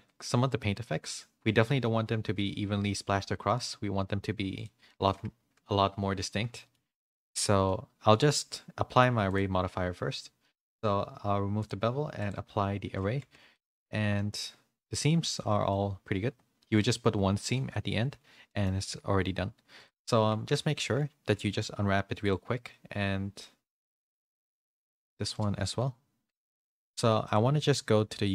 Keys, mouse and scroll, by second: 4.5 click, 4.8 middle click, 6.5 shift+middle click, 6.9 click, 7.1 middle click, 7.6 Tab, 7.6 middle click, 9.3 Tab, 9.3 click, 12.1 click, 12.8 ctrl+a, 13.2 Tab, 13.5-15.3 middle drag, 15.3 a, 15.7-18.6 middle drag, 20.5 Tab, 20.5 a, 21.3 u, 25.2 Tab, 25.2 a, 26.2 u.